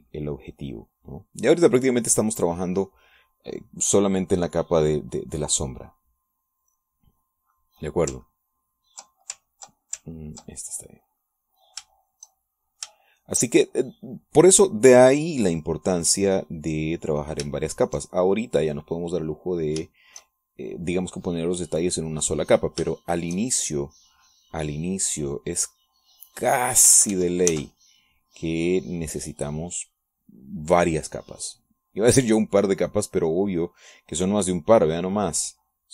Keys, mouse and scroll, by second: 1.3 shift+click, 1.6-4.0 shift+drag, 4.1-7.7 shift+drag, 7.9 shift+middle click, 8.5 shift+click, 9.8 ctrl+click, 10.7 ctrl+click, 11.4 ctrl+click, 12.1 click, 13.2 shift+click, 14.2 shift+click, 14.7-17.9 shift+drag, 18.0-19.3 drag, 19.4-20.7 shift+drag, 21.2 shift+click, 22.3-24.7 drag, 25.0-28.1 shift+drag, 28.2 ctrl+shift+z, 29.1-31.2 ctrl+shift+drag, 32.3-33.8 drag, 33.9-35.0 drag, 35.8 middle click.